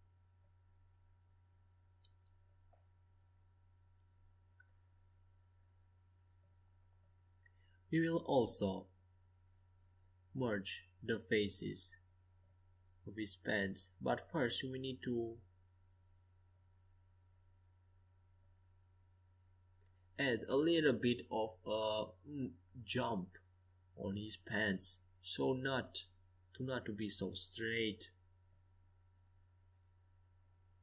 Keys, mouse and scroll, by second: 0.3 c, 1.6 f, 2.3 a, 2.6 c, 4.1 f, 11.4-14.0 right drag, 14.0-15.9 drag, 15.9 c, 21.0-24.8 middle drag, 21.6 g, 30.6 a.